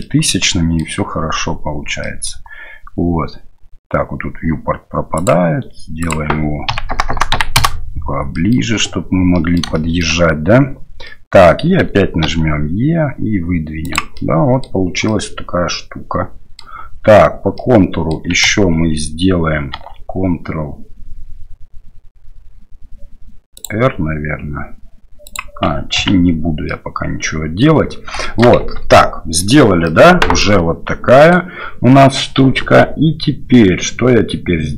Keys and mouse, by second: 0.2 middle click, 2.1 middle click, 5.2 click, 6.1-8.1 drag, 7.1 KP_0, 8.5 middle click, 9.4 click, 9.9 shift+click, 11.2 click, 14.2 click, 15.2-16.6 drag, 17.7 click, 19.7 ctrl+r, 26.0 ctrl+z, 26.7 click, 28.2 shift+middle click, 28.6 Tab, 28.9-29.4 middle drag, 29.8-31.3 middle drag.